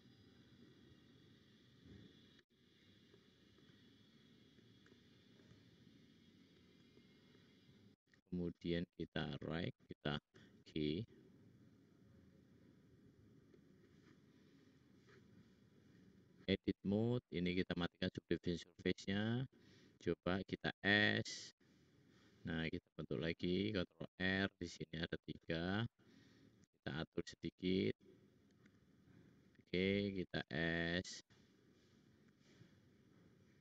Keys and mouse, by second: 3.1 middle click, 3.9 shift+click, 4.3 shift+click, 5.4-6.7 shift+drag, 7.8 `, 10.2 g, 19.0 click, 19.2 click, 20.5 s, 23.9 ctrl+r, 28.6 s, 30.3 s, 31.6 click, 31.9 click, 32.3 s.